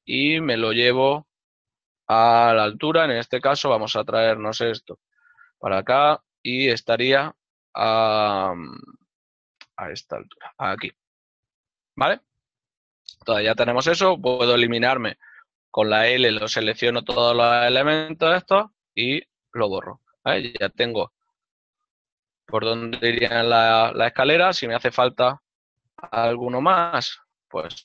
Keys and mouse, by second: 3.0 z, 3.2 click, 3.7 g, 5.5 g, 14.2 right click, 15.7 l, 19.2 click, 20.7 ctrl+middle click, 24.2 right click, 25.9 l.